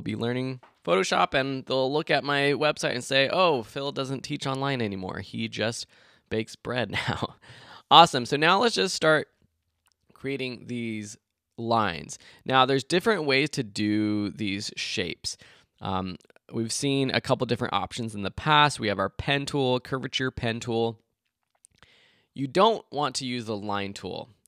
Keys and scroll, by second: 0.2 Left.